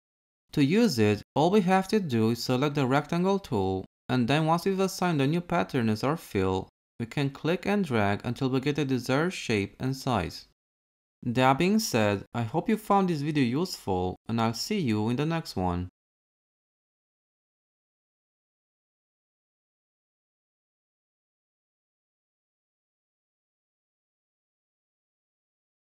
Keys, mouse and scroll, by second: 2.9 m.